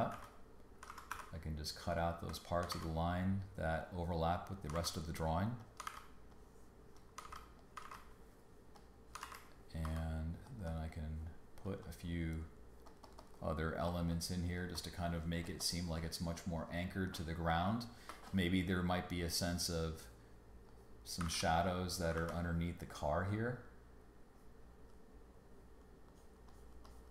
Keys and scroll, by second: 0.1 super+x, 0.9 super+z, 1.1 super+d, 2.7 super+x, 4.7 super+x, 6.1 super+x, 7.2 super+x, 9.2 super+x, 9.8 b, 13.9 space, 18.1 space, 18.9 space, 21.2 super+z.